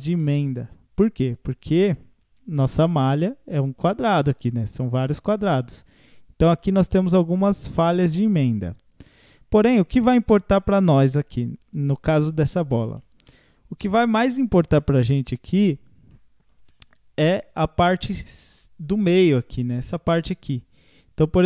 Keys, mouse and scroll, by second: 0.2-2.5 middle drag, 2.5 Tab, 2.8-8.4 middle drag, 8.4 Tab, 8.8 scroll down 1, 9.0-12.0 middle drag, 13.0-21.4 middle drag.